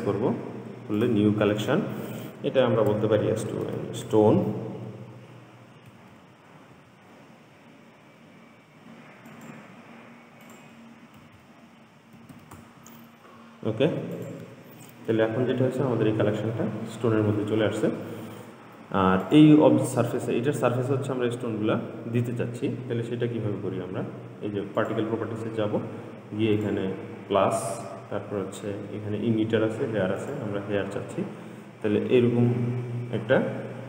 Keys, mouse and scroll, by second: 6.4 BackSpace, 11.6 BackSpace, 15.8-16.3 scroll up 2, 16.3-17.1 scroll down 10, 17.3-18.1 scroll down 4, 18.1-18.9 scroll up 1, 19.5 click, 25.0 click, 26.8-29.9 drag, 30.6 click, 32.3-33.1 scroll down 2.